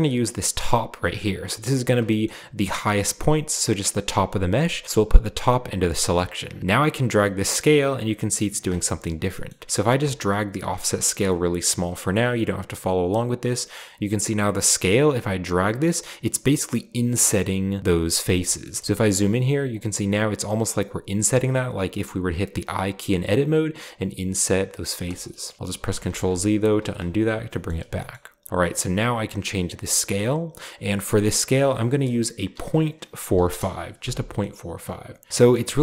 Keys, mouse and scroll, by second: 0.6 click, 1.3 click, 4.8-5.9 drag, 6.5-8.5 shift+drag, 8.5-9.0 shift+middle drag, 9.0-9.8 scroll up 1, 10.0-12.6 shift+drag, 13.0-14.1 shift+drag, 18.1-18.8 shift+drag, 18.8-19.5 scroll up 1, 21.3-22.2 shift+middle drag, 23.8-25.0 shift+drag, 25.3 middle click, 25.6 ctrl+z, 26.0 ctrl+z, 27.2-28.1 scroll down 1, 27.4 middle click, 28.5-30.7 shift+drag, 31.2 click, 32.5-33.3 typing, 33.4 Return, 34.2-35.1 scroll down 1, 34.3-35.1 middle drag, 35.5-35.8 scroll up 1.